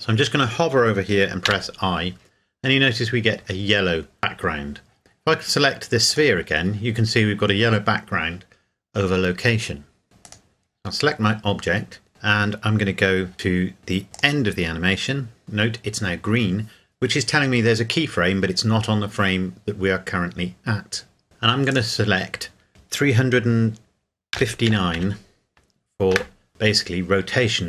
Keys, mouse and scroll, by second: 6.1 right click, 10.2 right click, 14.1 click, 21.7 click, 24.3 KP_3, 24.7 KP_5, 25.0 KP_9, 26.2 KP_Enter.